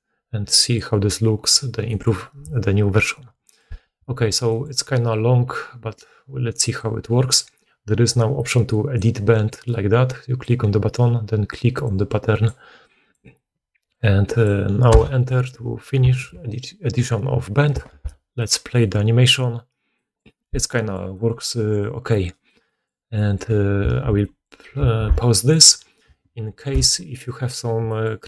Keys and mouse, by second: 0.5-28.2 drag, 3.4 middle click, 3.4 right click, 17.8 shift+space, 23.8 shift+space, 24.9 alt+a.